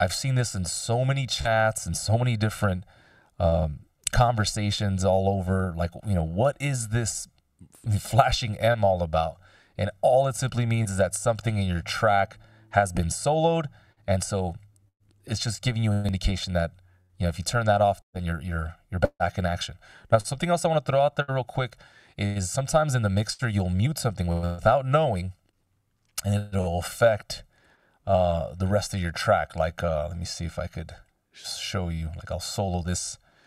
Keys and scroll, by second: 9.3 ctrl+alt+super+m, 21.0 x.